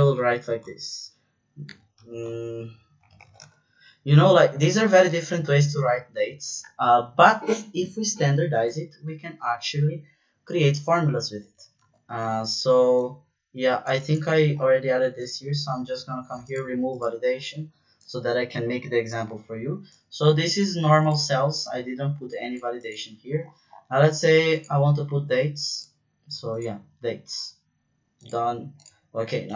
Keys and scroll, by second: 0.0-3.5 typing, 11.8 ctrl+z, 12.1 ctrl+z.